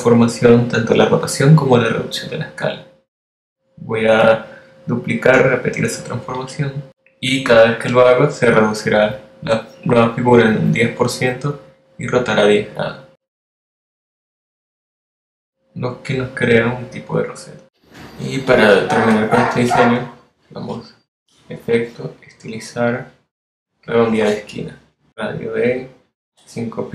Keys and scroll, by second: 9.0 super+d, 11.1 super+d, 14.0 super+d, 24.8 5, 25.9 p, 26.6 x.